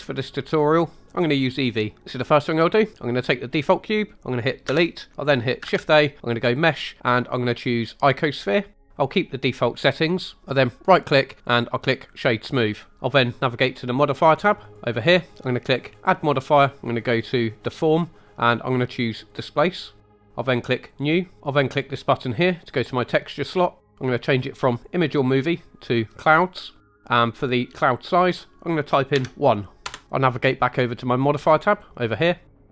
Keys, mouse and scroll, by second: 3.5 click, 4.6 Delete, 5.6 shift+a, 10.8 right click, 14.6 click, 15.9-19.3 drag, 20.8 click, 22.5 click, 24.7-25.9 drag, 28.0-29.8 drag, 31.6 click.